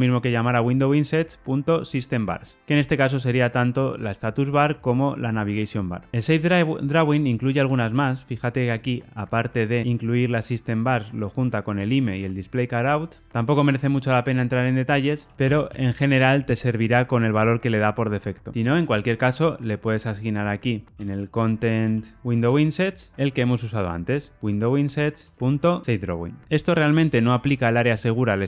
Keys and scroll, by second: 6.1 super+z, 7.9 super+b, 22.2 ctrl+space, 22.4 Return, 25.1 Return.